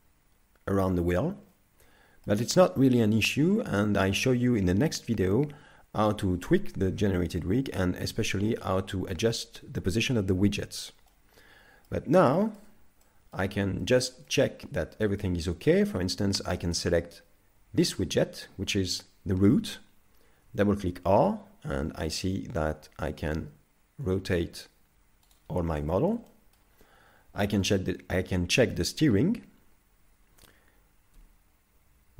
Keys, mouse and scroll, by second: 1.5 middle click, 8.6 scroll down 2, 11.1 middle click, 12.4 shift+middle click, 13.0 middle click, 13.8 shift+middle click, 14.3 middle click, 15.0 shift+middle click, 16.8 right click, 20.5 r, 25.9 shift+middle click, 26.3 middle click, 26.8 scroll down 1, 27.7 right click, 31.2 g.